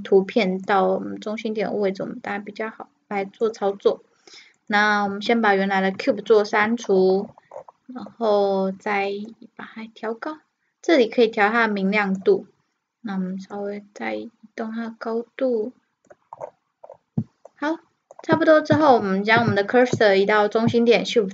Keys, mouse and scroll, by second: 0.7-2.4 drag, 4.6-6.9 right drag, 5.1 Delete, 6.9-9.3 middle drag, 9.3-11.1 drag, 9.5 middle click, 13.6-15.3 drag, 16.4-18.0 middle drag, 18.9 shift+c.